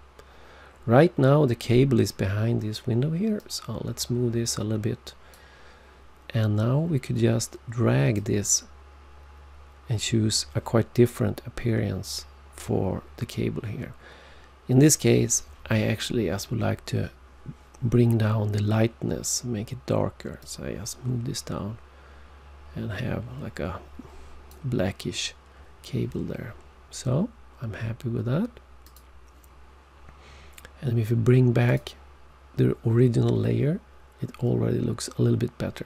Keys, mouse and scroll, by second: 3.4 click, 8.1 click, 20.4 click, 28.8 click, 31.7 click.